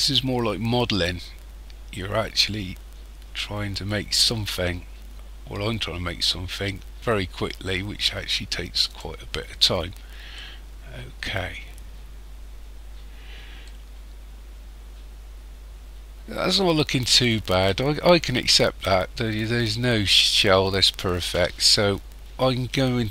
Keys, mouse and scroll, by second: 9.3-10.4 scroll down 7, 10.4 middle click, 11.8-13.3 scroll down 6, 13.3 scroll down 1, 13.6 middle click.